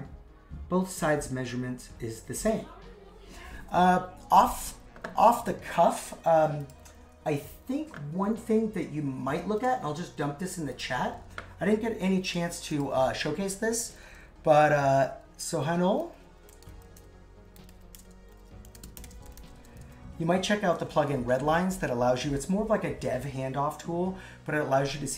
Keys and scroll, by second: 11.1 super+c, 15.4 shift+s, 19.8 super+v.